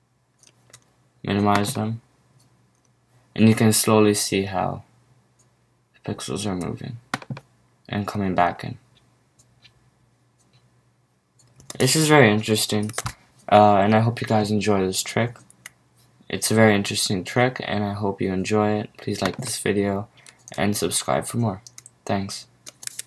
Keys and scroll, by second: 12.9 super+q.